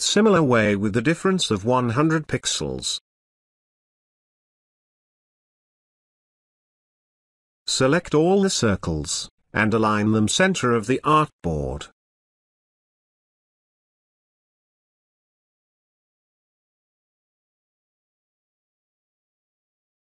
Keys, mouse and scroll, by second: 2.0 click, 5.4-6.9 drag, 13.2 space, 13.4-15.1 ctrl+drag, 15.5-16.7 ctrl+drag, 17.6-20.1 ctrl+drag.